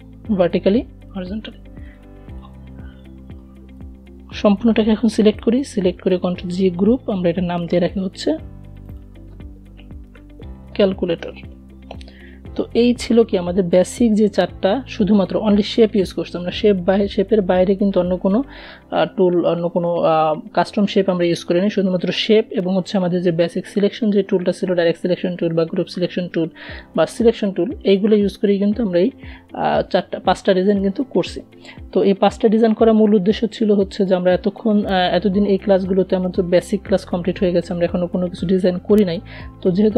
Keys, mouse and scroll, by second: 4.4 ctrl+g, 7.0 click, 7.9-10.4 typing, 13.9 click.